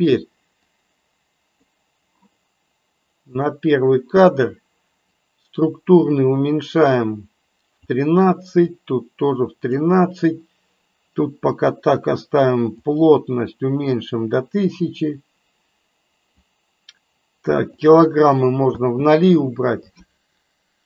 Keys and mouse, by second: 0.6 click, 3.2 click, 5.1-7.8 drag, 8.8-9.8 drag, 12.8-16.2 drag, 17.8 click, 18.6 space.